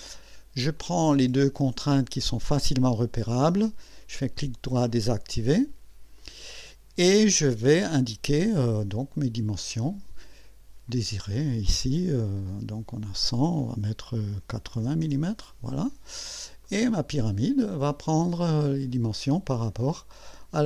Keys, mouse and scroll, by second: 0.8-1.5 drag, 3.8 right click, 4.8 click, 5.3 right click, 6.2 click, 9.1 click, 10.9 click, 14.5 KP_8, 14.7 KP_0, 15.0 KP_Enter, 16.6 click, 17.8-18.8 drag, 19.8 click.